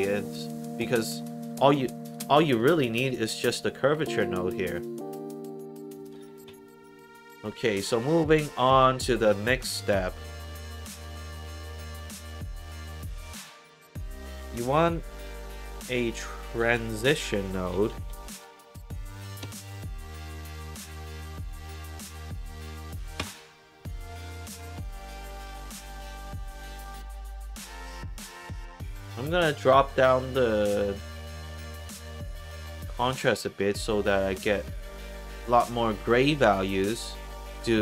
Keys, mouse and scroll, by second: 1.6 click, 2.5 click, 3.2 click, 4.4 middle click, 5.9 click, 6.8 middle click, 8.1-9.5 scroll down 2, 9.5 click, 10.1 scroll up 2, 10.4 click, 10.8 middle click, 12.2 click, 14.6 click, 15.8 click, 16.6 Tab, 17.4-18.4 typing, 19.4 Down, 23.1 Return, 26.9 middle click, 27.5 click, 27.6 click, 35.9 alt+click, 36.4 alt+right click.